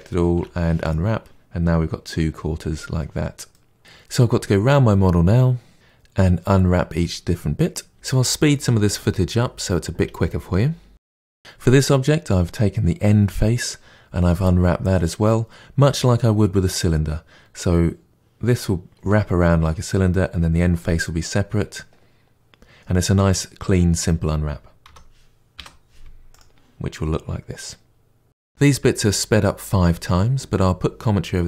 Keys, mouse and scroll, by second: 0.8 u, 3.6-8.4 middle drag, 8.4 Tab, 8.5 middle click, 8.7 Tab, 8.7 shift+middle click, 9.1 KP_Divide, 9.2 middle click, 9.5 alt+click, 9.9 ctrl+e, 10.1 shift+middle click, 10.4 3, 10.8 ctrl+e, 24.8 a, 26.3 u, 28.3 shift+middle click, 28.3 Tab, 28.4 click, 28.5 KP_Divide, 28.7 Tab, 28.8 middle click, 29.1 2, 29.3 click, 29.3 shift+click, 29.5 shift+click, 29.6 shift+click, 29.7 shift+click, 29.8 middle click, 30.0 shift+click, 30.1 shift+click, 30.2 shift+click, 30.3 middle click, 31.1 ctrl+e, 31.1 middle click.